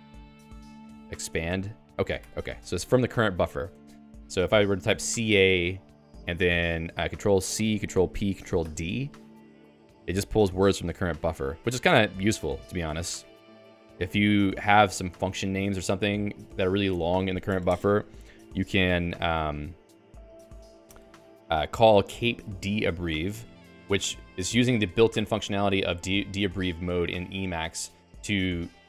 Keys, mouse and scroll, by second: 0.0-0.9 typing, 1.2 ctrl+j, 1.5 Return, 2.2 Escape, 2.5-5.3 typing, 4.1 Return, 9.8 p, 10.7 e, 14.3 Return, 14.7-16.5 typing, 16.6 ctrl+s, 16.9 Escape, 19.7-24.8 typing, 23.3 Escape.